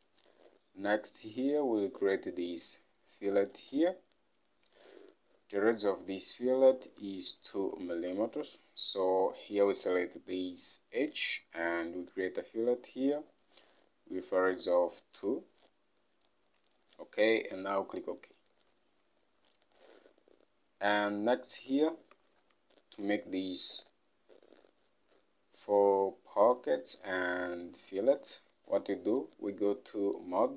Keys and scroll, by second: 8.1 ctrl+Tab, 15.3 2, 19.4 Home, 22.4 ctrl+Tab.